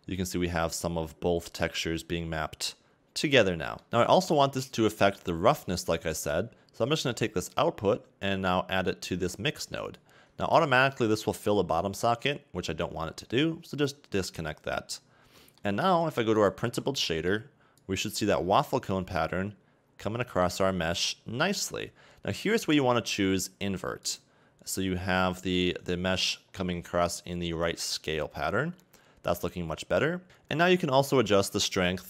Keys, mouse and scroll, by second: 0.0 scroll up 3, 0.7-1.2 scroll up 8, 1.4-2.4 scroll down 7, 3.9 click, 4.9 scroll down 3, 5.2 middle click, 5.8-6.2 scroll down 3, 7.1 click, 10.0 click, 13.9 click, 16.5 ctrl+shift+click, 17.9 click, 18.8-19.5 scroll up 2, 19.5-20.0 scroll up 1, 20.1 middle click, 22.1-22.5 scroll up 2, 24.1 click, 25.1-25.5 scroll down 1, 27.4-27.8 scroll down 3, 28.0-28.8 scroll up 1, 28.8 middle click, 30.7-31.6 scroll down 2.